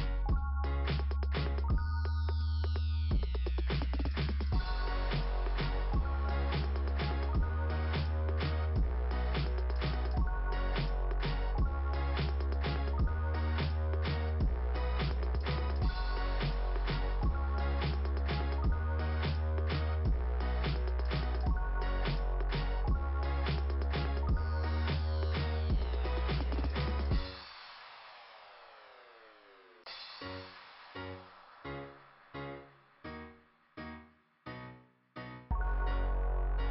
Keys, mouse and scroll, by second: 1.1 click, 4.3-5.3 scroll down 2, 5.3 click, 6.0 scroll down 2, 7.8 scroll up 1, 9.3-9.6 scroll down 2, 10.7 click, 12.4 click, 13.5-16.6 typing, 13.9 middle click, 14.1 middle click, 19.2 click, 20.6 click, 21.3-24.1 typing, 24.5-25.8 scroll up 2, 28.0 click, 28.1 click, 31.2 scroll down 2, 33.8 click.